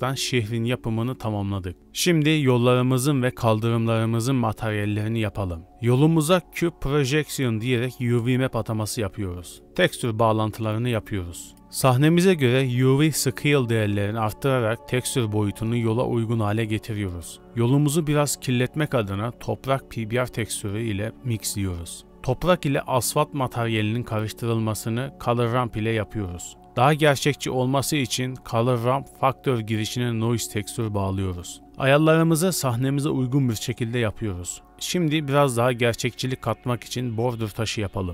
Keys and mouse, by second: 0.3 click, 0.3 middle click, 0.3 right click, 1.7 g, 3.9 click, 4.6-6.0 drag, 6.2 ctrl+shift+t, 11.5 click, 14.0-15.4 drag, 16.1 Tab, 16.2 middle click, 16.3 click, 17.0 shift+drag, 17.2 click, 17.3 middle click, 17.4 ctrl+shift+d, 17.6 ctrl+shift+t, 20.8 shift+middle drag, 22.0 middle click, 22.9 middle click, 23.0 shift+a, 26.6 shift+a, 29.5-30.7 drag, 31.5 click, 32.5 click, 33.0 click, 33.8-35.0 drag, 36.1 shift+middle drag, 36.4 middle drag, 36.9 shift+middle click, 37.2 middle drag, 38.0 middle drag.